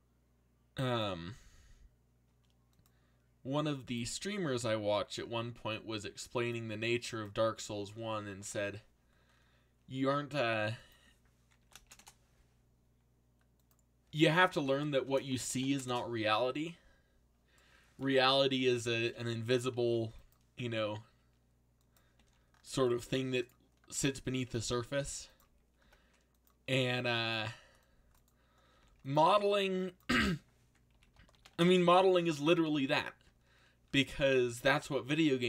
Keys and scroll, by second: 11.6 1, 11.8 shift+', 11.9 Return, 14.1-16.2 typing, 19.4-20.3 typing, 24.6-25.8 typing, 27.3 c, 28.4-29.3 typing, 30.6-32.0 typing.